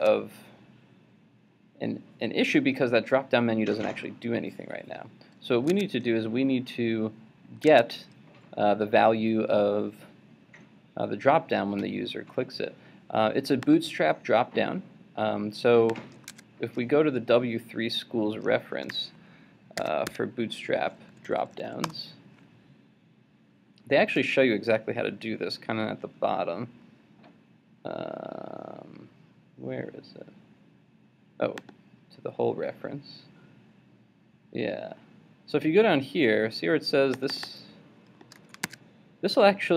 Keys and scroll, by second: 0.0 super+Tab, 5.7 super+Tab, 16.3 super+Tab, 18.9 super+t, 38.4 super+c, 38.7 super+Tab.